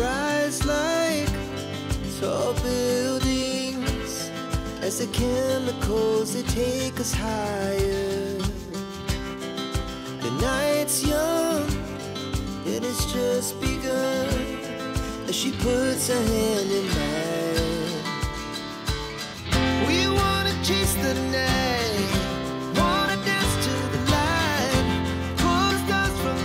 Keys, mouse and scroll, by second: 5.4 click, 7.3 click, 8.3 click, 10.3 click, 11.5 click, 13.6 click, 15.7 click, 16.4 click, 18.8 click, 21.6 click.